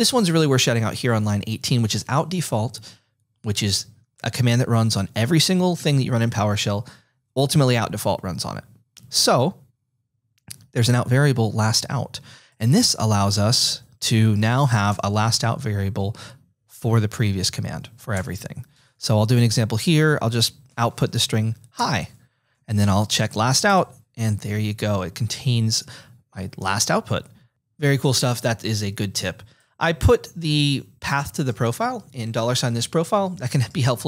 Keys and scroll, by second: 13.4-15.4 typing, 18.2 Return, 19.6-23.9 typing, 21.7 Return.